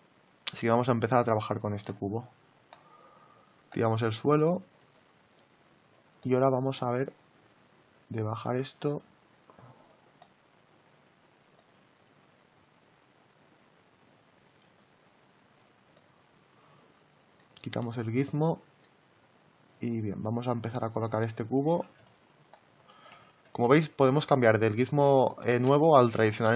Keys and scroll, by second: 23.2 ctrl+z.